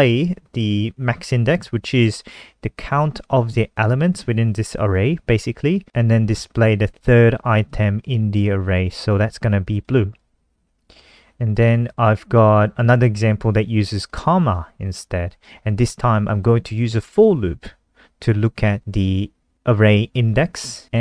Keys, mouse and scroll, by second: 10.1 click, 12.6 click.